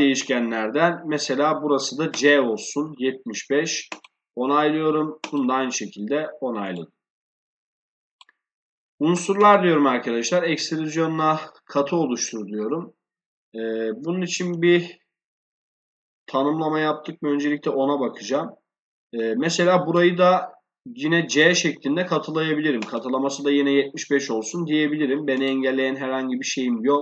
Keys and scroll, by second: 14.9 shift+0.